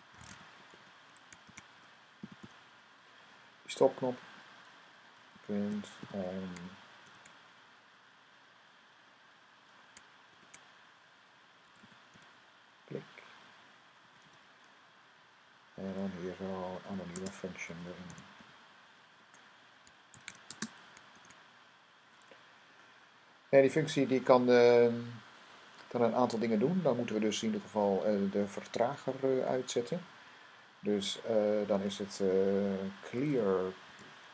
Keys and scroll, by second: 0.0-2.8 typing, 3.4 Right, 3.9 Right, 5.2-7.5 typing, 11.6 typing, 13.8-15.4 typing, 16.7-21.0 typing, 32.7-33.8 typing.